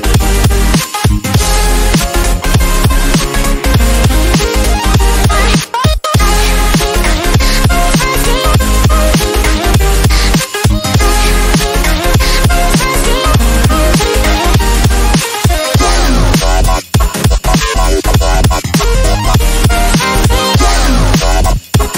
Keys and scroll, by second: 15.1 ctrl+d, 20.1 space.